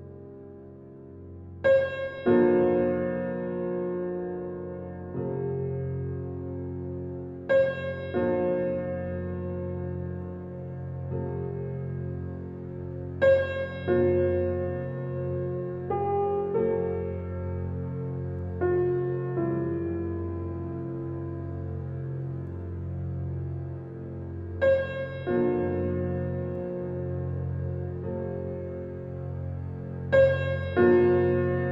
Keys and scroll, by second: 1.9 Right, 2.2 Right, 2.4 Right, 2.7 Right, 3.0 Right, 3.2 Right, 3.3 Right, 3.6 Right, 3.8 Right, 4.1 Right, 4.3 Right, 4.5 Right, 7.6 Left, 12.4 Right, 12.7 Right, 12.9 Right, 13.4 Right, 16.2 Right, 16.9 Right, 17.2 Right, 17.4 Right, 17.7 Left, 18.1 Left, 18.5 Left, 18.8 Right, 19.4 Right, 20.2 Right, 21.0 Right, 21.3 Right, 21.5 Right, 21.9 Right, 22.3 Right, 23.0 Right, 26.1 Right, 31.5 Right.